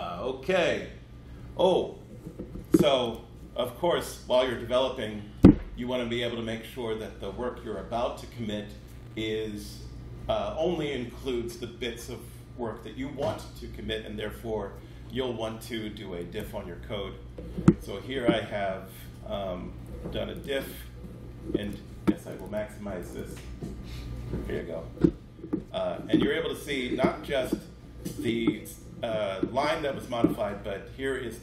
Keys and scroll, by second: 16.3 super+d.